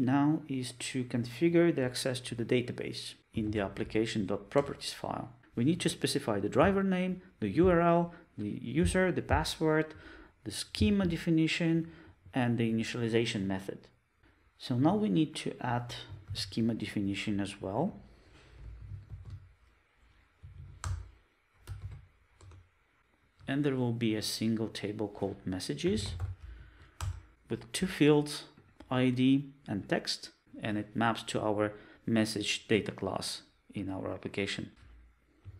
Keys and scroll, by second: 4.4 super+e, 7.2 Return, 7.9 Return, 10.5 Return, 11.9 Return, 13.1 Return, 16.5 super+c, 19.1 super+n, 21.8 super+v, 27.1 Return.